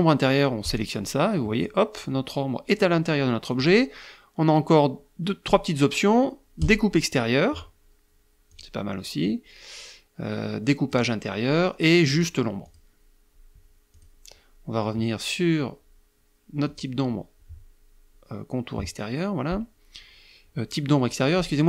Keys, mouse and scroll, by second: 0.3 click, 3.2 click, 6.3 click, 8.1 click, 8.9-10.8 drag, 11.8 click, 12.3 click, 13.5 click, 16.3 click.